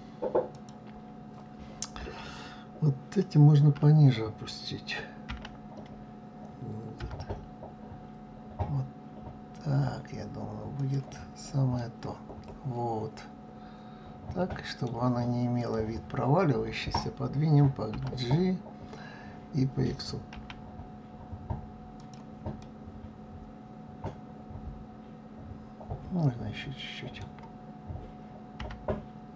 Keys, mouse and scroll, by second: 0.0 click, 4.8 g, 11.3-14.3 middle drag, 15.1 click, 17.4 g, 22.1-25.1 middle drag, 28.1 g.